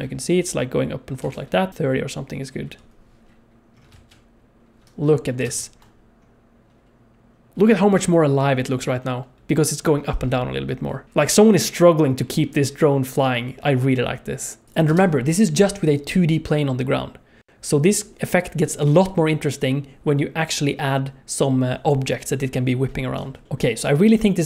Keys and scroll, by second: 1.2 space, 2.6 KP_0, 3.9 alt+shift+z, 5.5 ctrl+space, 14.6 space, 14.9 space, 23.1 space.